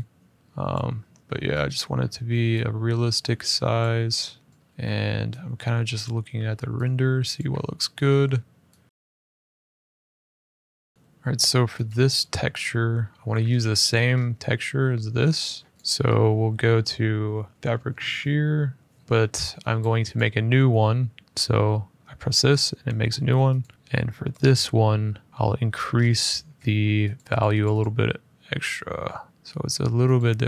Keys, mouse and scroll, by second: 0.4 click, 1.1 middle click, 1.3 middle click, 1.9 s, 3.5 click, 3.8 r, 4.5 click, 4.5 g, 5.8 click, 6.0 r, 7.1 click, 7.7 middle click, 8.8 s, 9.0 click, 9.0 r, 9.8 g, 10.1 middle click, 10.2 ctrl+s, 10.8 middle click, 10.9 Tab, 10.9 click, 11.2 z, 11.6 click, 13.0 middle click, 13.2 middle click, 13.2 middle click, 13.2 middle click, 13.3 scroll, 13.9 scroll, 15.7 click, 17.5 click, 19.9 click, 23.3 click, 25.3-25.9 scroll, 26.2 middle click, 26.9 click, 27.2 click, 27.4 click, 27.5 click, 29.3 click, 29.9 click.